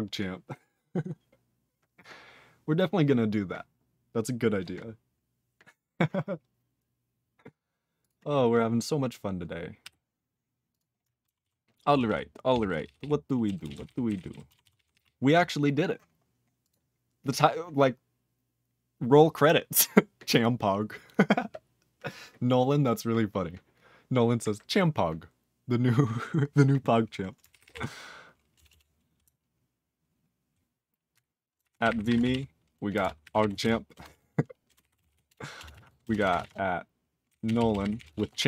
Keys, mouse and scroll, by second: 9.8 q, 10.7 click, 10.7 click, 11.4 ctrl+s, 11.9 ctrl+p, 12.0 ctrl+p, 12.5 ctrl+p, 12.7 ctrl+p, 12.8 ctrl+p, 13.0 ctrl+p, 13.4 ctrl+a, 13.6 ctrl+space, 13.6 ctrl+e, 13.7 ctrl+n, 13.8 ctrl+e, 13.8 ctrl+n, 14.0 ctrl+g, 14.1 ctrl+n, 14.3 ctrl+n, 14.6 ctrl+s, 14.7 ctrl+p, 14.9 ctrl+p, 16.6 click, 16.7 click, 27.5 ctrl+p, 27.6 ctrl+p, 27.7 ctrl+e, 28.5 Return, 28.7 Return, 31.4-38.4 typing, 36.3 Delete.